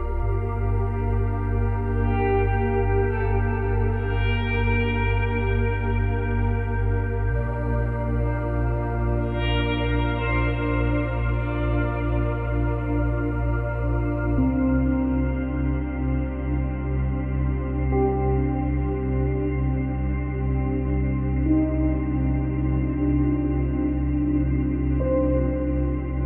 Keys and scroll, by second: 2.4 space, 3.2 space, 6.9 ctrl+z, 8.5 space, 10.4 space, 13.4 space, 25.1 space.